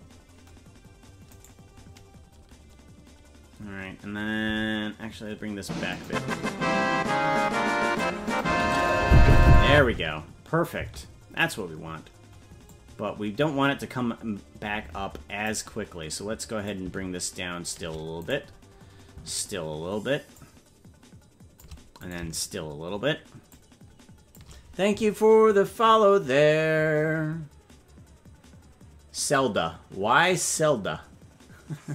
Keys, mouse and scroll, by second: 1.3 right click, 4.4 g, 6.3-8.1 drag, 8.4 click, 8.5 space, 9.5 click, 9.5 space, 9.9 space, 11.6 right click, 11.6 space, 12.7-15.6 drag, 16.7-17.8 drag, 18.4 right click, 20.3-21.7 shift+drag, 22.2 right click, 23.5 shift+click.